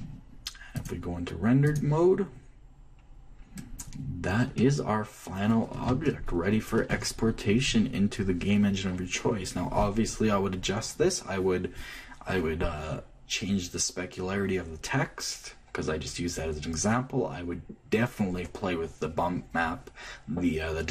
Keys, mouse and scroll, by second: 0.0-1.1 drag, 0.0 m, 1.5-3.3 drag, 5.3-8.7 middle drag, 6.6 Left.